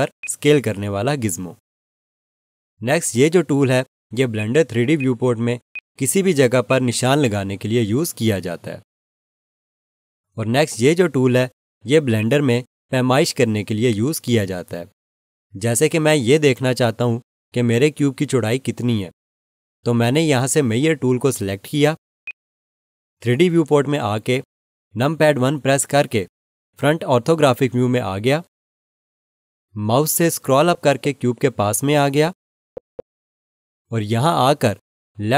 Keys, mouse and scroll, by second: 2.3 ctrl+z, 4.3 click, 12.1 click, 22.2 click, 25.7 1, 30.5-30.8 scroll up 1.